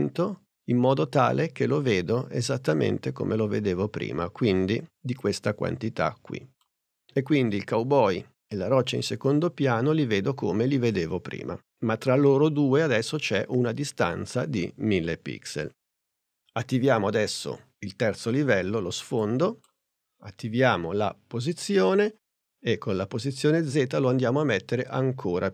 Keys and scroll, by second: 20.6 p.